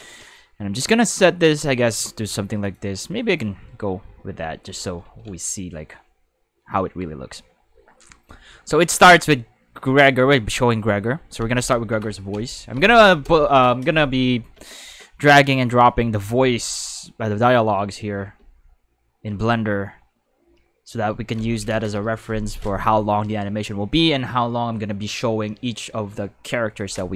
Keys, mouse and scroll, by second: 2.6 click, 5.0 ctrl+s, 10.2 space, 11.4 space, 12.3 space, 12.8 space, 15.6 click, 17.4 click, 18.3 space, 21.3 space.